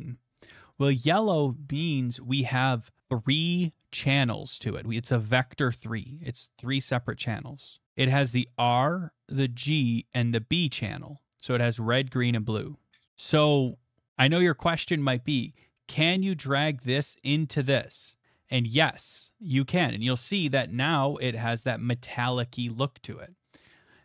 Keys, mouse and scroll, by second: 1.2 middle click, 18.3 click, 22.0 middle click.